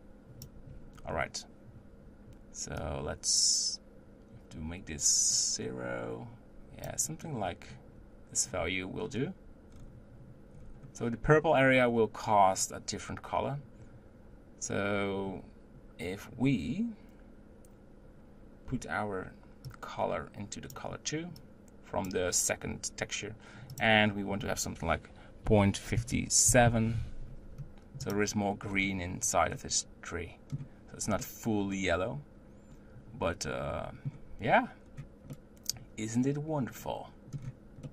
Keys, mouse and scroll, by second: 1.1-3.0 scroll up 2, 3.0-9.7 drag, 9.7-10.6 scroll down 4, 10.6-14.1 scroll up 4, 19.9-22.2 drag, 23.8-28.7 drag, 28.7-29.6 scroll down 3, 29.6-30.1 middle drag, 31.3-34.8 middle drag, 34.8-35.4 scroll down 1, 35.4-37.5 middle drag, 37.5-37.9 scroll down 1.